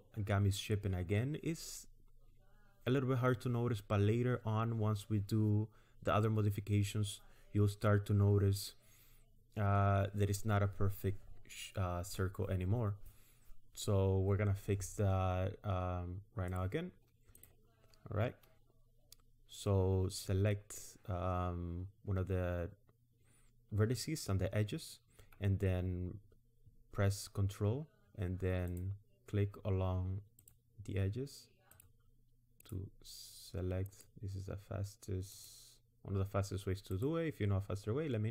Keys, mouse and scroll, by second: 16.5 click, 17.4 click, 28.7 ctrl+click, 30.4 ctrl+click, 31.7 ctrl+click, 32.6 ctrl+click, 35.2 ctrl+click, 35.4 ctrl+click, 36.9 ctrl+click.